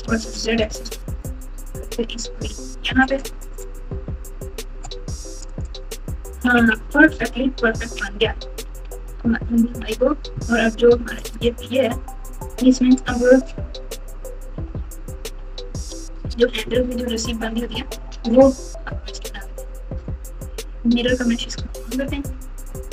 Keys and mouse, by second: 3.4 click, 3.9 Tab, 4.3 Tab, 4.6 Tab, 5.7 Tab, 6.4-9.8 typing, 11.3 click, 12.3 Tab, 14.5 KP_4, 15.2 KP_7, 16.6-17.4 ctrl+KP_8, 17.7-18.3 ctrl+KP_6, 18.4-19.0 ctrl+KP_8, 22.8 click.